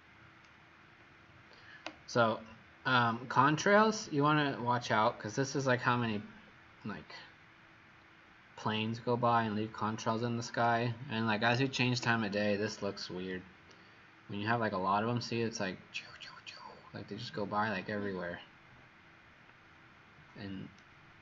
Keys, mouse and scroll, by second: 13.7 shift+right click.